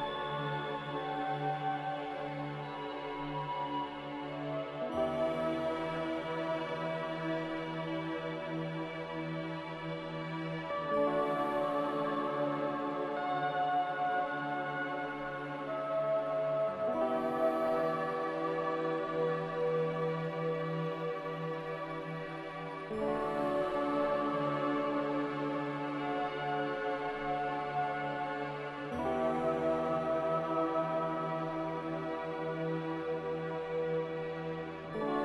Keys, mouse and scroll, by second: 2.4 z, 3.9-4.8 typing, 12.4-13.3 typing, 19.0 q, 19.2 q, 23.4 z, 24.8-26.4 typing, 28.1 c.